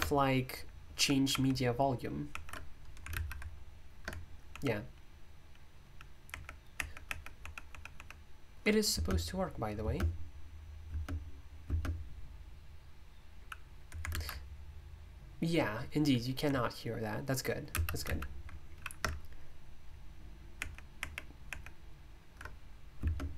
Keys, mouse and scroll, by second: 3.1 super+,, 8.9 space, 9.8 space, 10.8 space, 11.6 space, 14.1 alt+super+m, 17.7 super+m, 18.0 super+,, 23.0 space.